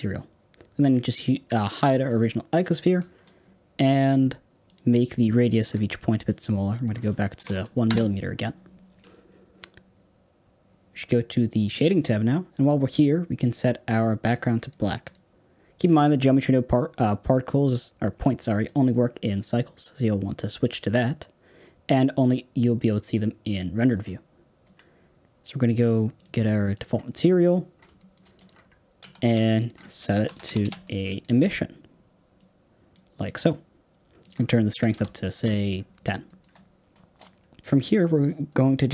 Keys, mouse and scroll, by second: 14.2 click, 19.5-23.6 drag, 24.0 scroll down 4, 24.7-25.6 scroll up 2, 25.6-26.7 drag, 28.4 click, 28.9 x, 29.4 shift+a, 32.8 click, 33.2 click, 35.3 click, 35.9-36.2 scroll down 3, 36.2 shift+middle click, 36.6 scroll down 3, 37.2 scroll up 2.